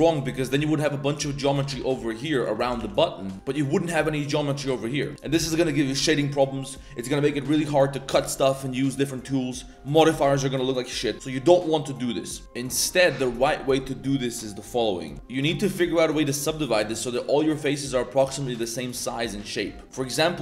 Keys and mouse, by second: 0.0 1, 0.3 shift+click, 0.6 z, 1.3 z, 1.5 g, 2.6 g, 3.4 3, 3.5-3.8 drag, 4.4 middle click, 7.2 middle click, 8.3 middle click, 15.0 middle click, 15.1 ctrl+z, 15.1 ctrl+r, 15.6 ctrl+r, 17.4 3, 17.7 click, 17.9-18.3 middle drag, 18.3 shift+drag, 18.8 middle drag, 19.7 middle click, 20.0 middle click.